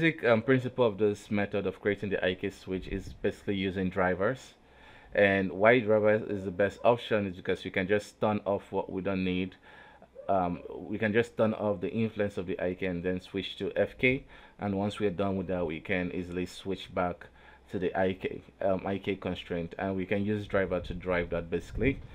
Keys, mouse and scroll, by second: 0.0 KP_3, 0.6 ctrl+Tab, 1.2 right click, 2.2 click, 4.5 right click, 6.2 right click, 8.0 right click, 8.4 alt+a, 9.1 right click, 10.2-11.7 drag, 12.0 right click, 13.3-15.8 drag, 15.8 right click, 16.4-17.6 drag, 17.6 right click, 18.2-19.4 drag, 19.4-22.1 right drag.